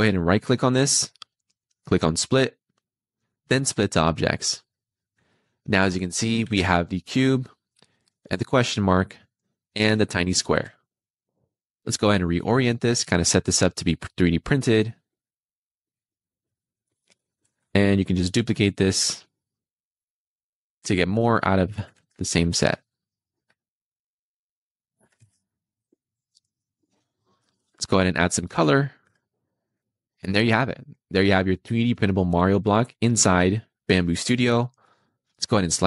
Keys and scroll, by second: 6.3 Escape, 10.4 r, 18.9 Escape, 21.7 super+c, 21.9 super+v, 24.9 super+c, 25.1 super+v, 28.5 2, 29.0 Escape.